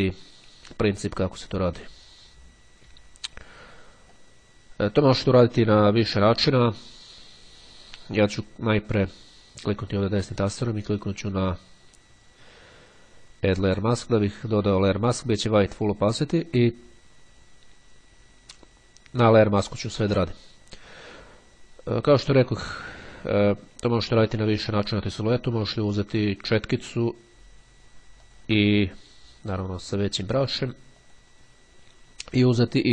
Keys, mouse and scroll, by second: 4.3-6.3 drag, 8.5-9.5 drag, 14.1 click, 16.7 click, 19.9 click, 28.4 click, 29.7 click, 31.1 click.